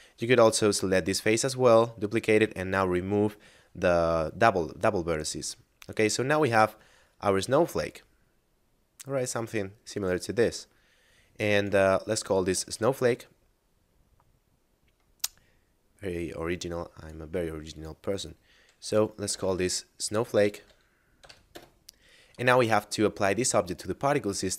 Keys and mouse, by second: 4.9 middle click, 6.4 Tab, 7.7 middle click, 10.2 a, 11.5 right click, 12.4 shift+space, 15.6 middle click, 17.0 click, 18.7-21.2 typing, 21.4 Return.